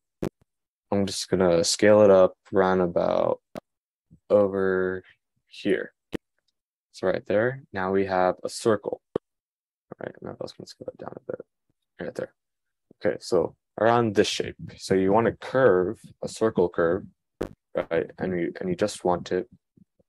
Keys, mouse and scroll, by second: 5.8-8.3 middle drag, 10.8 s.